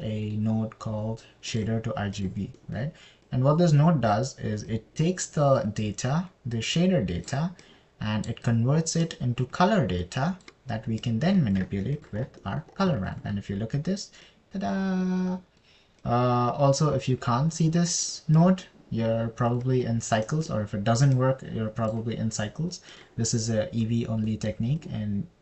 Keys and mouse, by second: 4.0 middle click, 4.7 click, 6.2 drag, 10.5 click, 12.5 click, 14.5 ctrl+shift+click, 15.8-17.0 drag, 17.5 click, 21.7 middle click, 22.6 click, 24.3 click.